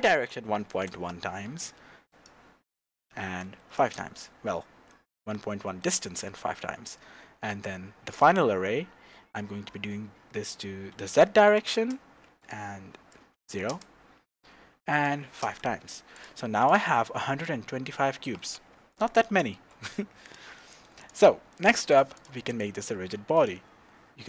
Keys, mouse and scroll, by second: 0.8 KP_Enter, 1.9-4.9 drag, 3.9 KP_Enter, 4.9-7.4 middle drag, 6.4 scroll down 2, 6.7-7.3 scroll up 2, 7.3 scroll up 1, 7.4-16.2 drag, 8.5-9.9 scroll down 2, 11.5 KP_1, 11.9 KP_Enter, 13.8 KP_Enter, 15.6 KP_Enter, 16.6 click, 17.0-20.3 middle drag, 19.3 g, 20.3 click, 20.5-21.0 middle drag, 21.0 click, 21.5-22.1 shift+middle drag, 22.1 click, 22.4 scroll down 2, 23.3 click.